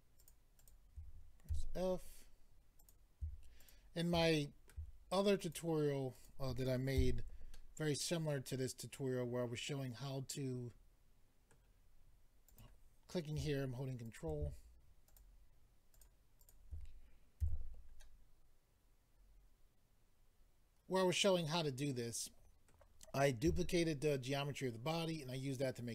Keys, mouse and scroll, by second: 0.2 shift+click, 0.6 shift+click, 1.5 f, 2.8 click, 3.6 shift+click, 4.3 middle click, 5.4 shift+click, 6.1 shift+click, 7.0 f, 7.5 middle click, 12.5 click, 14.0 ctrl+right click, 15.1 shift+click, 15.9 shift+click, 16.4 shift+click, 17.4 f, 18.0 middle click, 23.5 a.